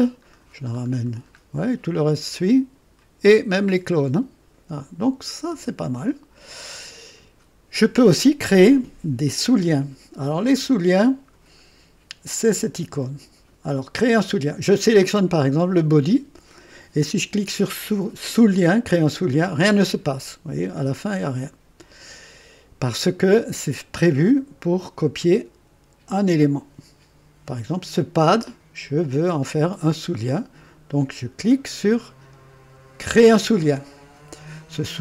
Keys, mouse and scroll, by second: 0.2-1.3 scroll down 3, 1.1 typing, 2.3 click, 5.4 click, 10.4-10.7 scroll up 2, 15.0 click, 19.0 click, 20.7-22.5 drag, 26.3 click, 33.1 click.